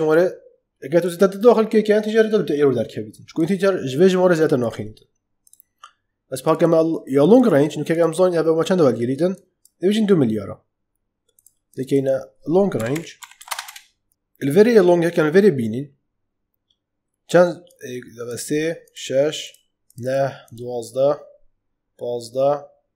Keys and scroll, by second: 12.4-13.8 typing.